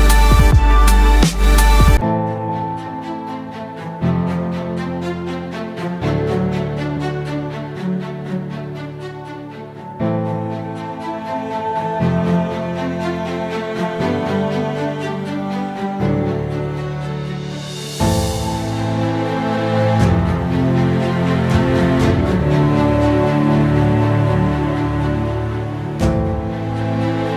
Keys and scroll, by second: 0.0-6.4 typing, 8.4 typing, 9.6-16.0 typing, 17.3-19.4 typing, 19.4 ctrl+t, 19.8 ctrl+z, 20.7 ctrl+z, 21.0 ctrl+t, 22.0 ctrl+x, 22.0 ctrl+t, 22.0 ctrl+z, 22.3-23.4 typing, 22.9 ctrl+t, 22.9 ctrl+x, 24.9-25.9 typing, 27.2-27.3 typing.